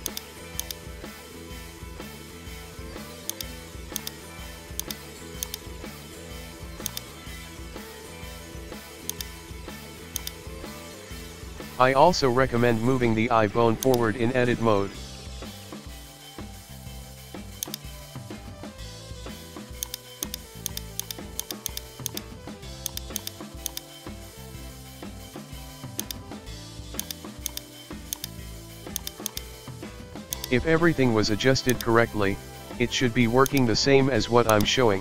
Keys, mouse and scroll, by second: 0.1 click, 0.9 scroll up 1, 1.2-1.9 scroll down 2, 1.4 shift+middle click, 1.9-3.3 middle drag, 3.3 right click, 3.5-4.0 shift+middle drag, 4.0-4.9 drag, 5.0-5.5 scroll up 1, 5.5 right click, 5.9 s, 7.5 KP_3, 7.9-8.4 shift+middle drag, 8.4-9.2 scroll up 3, 8.6 shift+middle click, 9.2 right click, 9.4 Tab, 10.2-11.7 drag, 11.7 middle click, 11.7 scroll, 12.5 Tab, 13.8 click, 14.5 scroll down 1, 14.8 shift+middle click, 15.0 shift+scroll, 15.2-16.3 middle drag, 16.3 scroll up 2, 17.2 g, 18.0-18.5 scroll down 1, 18.5 click, 19.8 shift+right click, 20.2 click, 20.7 right click, 21.0 right click, 21.4 shift+click, 21.7 right click, 21.7 KP_1, 22.1 click, 23.2 click, 23.9 s, 27.0 right click, 27.5 click, 28.1 click, 29.0 right click, 29.3 click, 30.6 s, 32.4 g, 33.7 shift+middle click, 34.5 click.